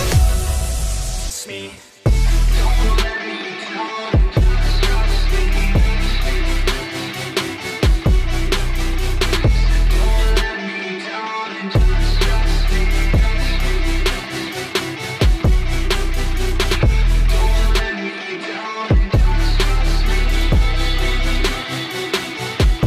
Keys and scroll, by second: 9.2 Escape.